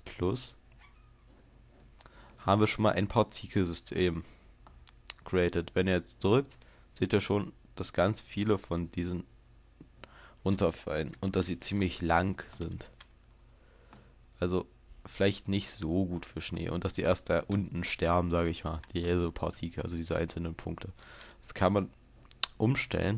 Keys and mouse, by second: 7.1-12.9 drag, 12.9 alt+a, 21.1 alt+a, 21.8-23.1 drag.